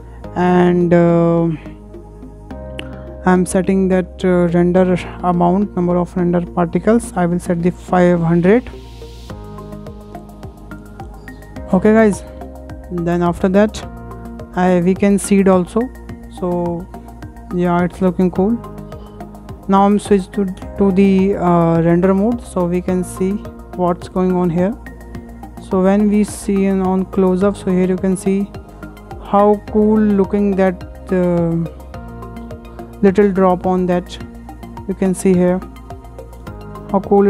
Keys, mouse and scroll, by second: 1.4-3.5 scroll up 7, 3.5-6.5 drag, 7.1 KP_5, 7.4 KP_0, 7.6 KP_0, 9.0-9.5 scroll up 7, 9.5 shift+middle click, 9.8-10.3 scroll down 3, 10.3-11.8 shift+middle drag, 12.0 scroll up 2, 12.3-12.7 shift+middle drag, 12.7 scroll down 1, 12.9-16.4 shift+middle drag, 16.4 click, 17.4-18.3 middle drag, 18.3-18.6 scroll down 1, 18.6-20.1 shift+middle drag, 20.1 scroll down 3, 20.3-22.2 shift+middle drag, 22.2 click, 23.2 click, 23.3 scroll up 8, 23.8-25.6 shift+middle drag, 25.6 scroll up 2, 26.1-27.0 shift+middle drag, 27.0 shift+click, 30.0 scroll down 2, 30.3-31.2 middle drag, 31.2-31.6 scroll up 3, 33.7 scroll down 1, 34.9-37.2 shift+middle drag.